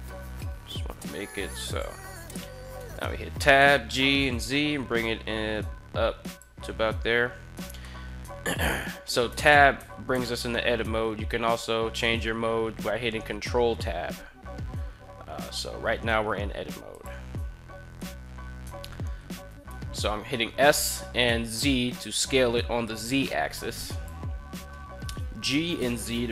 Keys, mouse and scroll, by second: 2.6 Tab, 3.3 g, 3.7 z, 6.1 click, 7.6 shift+middle drag, 9.0 Tab, 9.5 Tab, 9.9 Tab, 11.7 ctrl+Tab, 19.3 s, 19.5 z, 23.7 click, 24.8 g, 25.3 z.